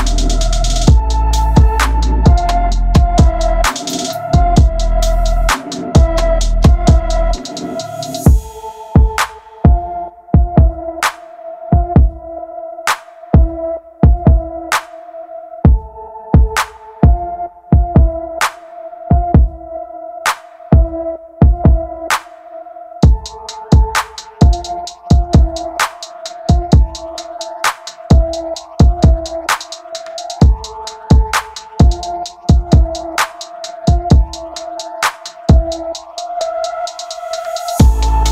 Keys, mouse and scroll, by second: 0.0-0.6 typing, 0.0 middle click, 0.5 click, 1.3 click, 1.8 shift+click, 1.8 g, 1.9 middle click, 2.2 shift+click, 2.3 middle click, 2.4 g, 2.5 middle click, 2.6 click, 2.9 middle click, 3.2 KP_3, 3.6 middle click, 3.7 KP_7, 3.9 middle click, 4.4 ctrl+r, 4.8 middle click, 4.8-6.4 typing, 5.1 middle click, 5.2 middle click, 5.9 middle click, 6.3 middle click, 6.4 middle click, 6.7 click, 6.9 click, 7.1 middle click, 7.3 click, 7.4 click, 7.4 alt+m, 7.6 middle click, 7.9 KP_3, 8.0 shift+middle click, 8.0 a, 8.6 middle click, 9.2 alt+click, 9.2 middle click, 9.7 v, 9.8 middle click, 9.9 g, 10.0 shift+middle click, 10.1 click, 10.1 middle click, 10.2 shift+click, 10.3 middle click, 10.4 scroll down 2, 10.6 click, 10.7 Tab, 11.0 middle click, 11.1 scroll up 4, 11.2 middle click, 11.3 e, 11.4 middle click, 11.4 f, 11.5 shift+click, 11.6 f, 11.6 middle click, 11.9 Tab, 12.1 middle click, 12.6-30.0 typing, 12.7 middle click, 12.8 middle click, 12.9-13.2 scroll up 4, 13.2 click, 13.4 click, 13.4 middle click, 14.0 middle click, 14.2 middle click, 14.6 middle click, 14.9 shift+middle click, 15.2 middle click, 15.2 scroll up 3, 15.5 middle click, 15.9 middle click, 16.0 middle click, 16.1 scroll up 1, 16.1 shift+click, 16.3 middle click, 16.7 middle click, 17.1 middle click, 17.2 middle click, 17.6 middle click, 18.1 shift+click, 18.2 middle click, 18.7 middle click, 18.8 Tab, 19.0 middle click, 19.1 scroll down 3, 19.6 middle click, 19.9 alt+shift+click, 20.1 middle click, 20.3 middle click, 20.4 scroll up 1, 20.5 shift+click, 20.6 middle click, 20.7 middle click, 21.1 middle click, 21.6 middle click, 22.4 scroll down 5, 22.4 middle click, 22.5 middle click, 22.7 middle click, 23.3 middle click, 23.6 middle click, 24.0 middle click, 24.2 middle click, 24.2 click, 24.5 middle click, 24.6 middle click, 24.8 middle click, 25.0 middle click, 25.1 shift+middle click, 25.7 middle click, 26.1 click, 26.4 middle click, 26.5 click, 26.5 middle click, 27.3 shift+middle click, 28.2 middle click, 28.3 middle click, 28.6 middle click, 28.8 middle click, 29.3 middle click, 29.8 middle click, 30.2 middle click, 30.4 scroll down 1, 30.5 middle click, 30.5 scroll up 4, 30.7 middle click, 31.0 shift+middle click, 31.0 shift+click, 31.2 shift+click, 31.4 middle click, 31.4 shift+click, 31.5 middle click, 31.8 middle click, 32.1 alt+shift+click, 32.2 middle click, 32.4 ctrl+e, 32.5 middle click, 32.7 scroll up 3, 32.7 alt+click, 32.8 middle click, 33.1 middle click, 33.3-36.7 typing, 33.4 middle click, 33.8 middle click, 34.1 scroll down 1, 34.2 middle click, 34.3 ctrl+r, 34.4 alt+shift+click, 34.4 middle click, 34.6 middle click, 34.8 middle click, 35.8 shift+middle click, 36.0 shift+middle click, 36.1 scroll up 5, 36.3 shift+middle click, 36.5 middle click, 36.8 shift+middle click, 37.7-38.1 scroll up 2, 38.1 middle click, 38.2 shift+click.